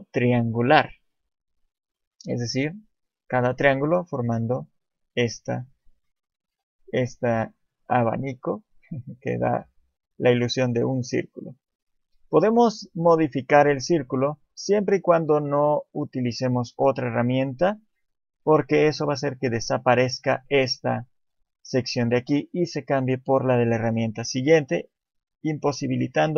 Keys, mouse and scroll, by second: 11.2 click, 11.5 click.